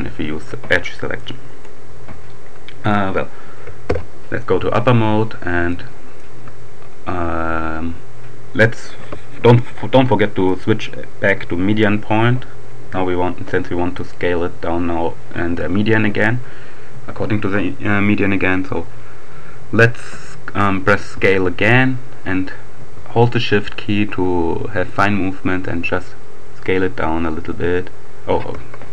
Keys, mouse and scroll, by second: 1.1-2.1 drag, 3.1 KP_7, 5.7-6.7 shift+drag, 10.1 click, 13.4-14.6 drag, 19.9 s.